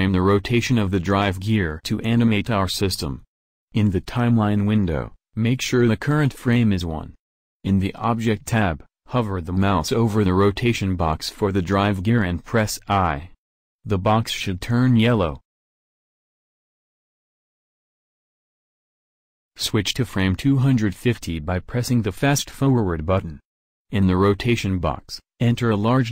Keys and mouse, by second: 13.9 i.